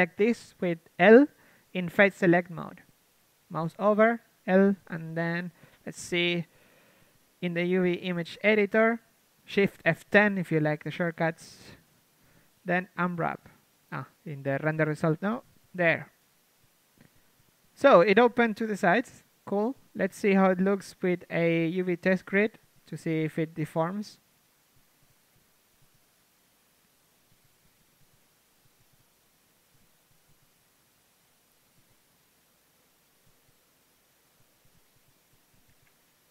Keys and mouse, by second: 0.5 ctrl+Tab, 3.0 l, 3.8 KP_1, 4.4 KP_3, 5.9 click, 8.8 shift+F10, 12.3 u, 15.2-16.2 drag, 15.7 a, 16.2 a, 19.0 u, 20.0 a, 20.2 r, 21.3-30.3 drag, 21.3 r, 21.7 g, 22.3 r, 30.7-32.2 drag, 35.7 r.